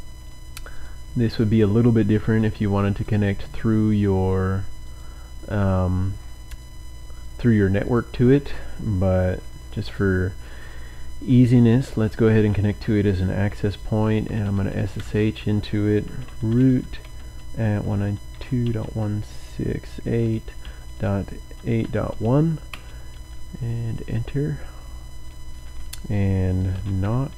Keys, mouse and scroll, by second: 0.7 click, 2.3 click, 4.1 right click, 4.8 click, 6.6-7.7 drag, 7.8 click, 14.0-22.7 typing, 22.7 Return, 26.8-27.3 typing.